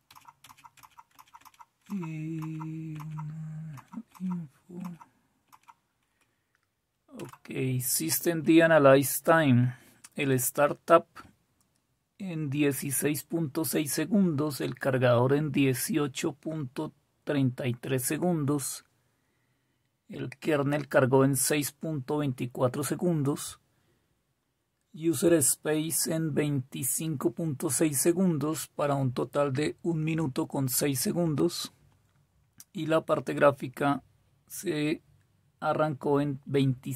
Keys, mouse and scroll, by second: 7.2 typing.